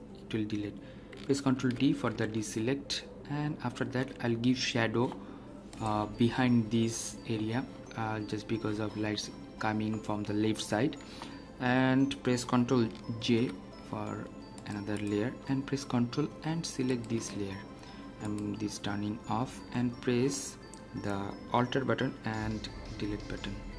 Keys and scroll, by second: 1.5 ctrl+d, 13.2 ctrl+j, 22.8 ctrl+Delete.